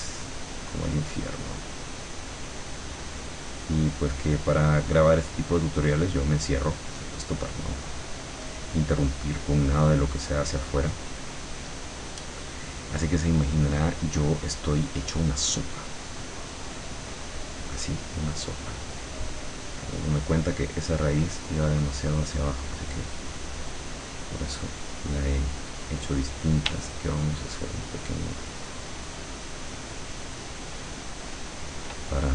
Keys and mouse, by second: 9.0-24.2 drag, 27.7-31.9 shift+drag.